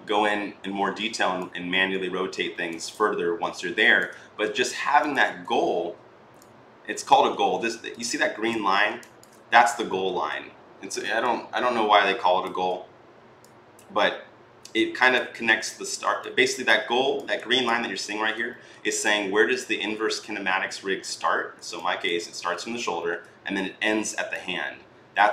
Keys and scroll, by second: 0.4 r, 5.4 e.